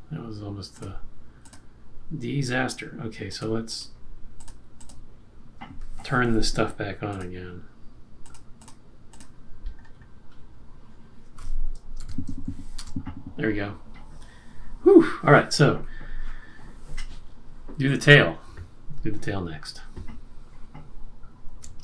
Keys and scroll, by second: 11.9 super+-, 12.7 Return, 13.5 Return.